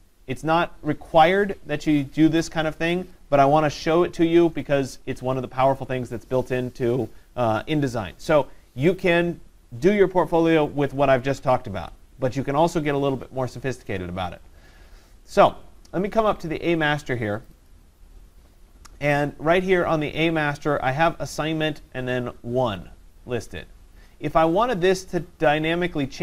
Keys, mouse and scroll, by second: 17.5 click, 17.7 click, 24.5 click.